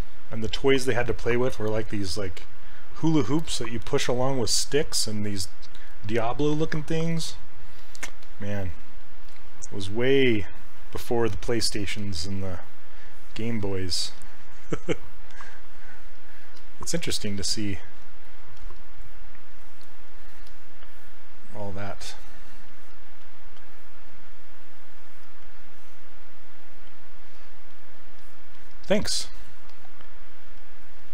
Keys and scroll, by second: 11.8 /, 17.3 ctrl+z.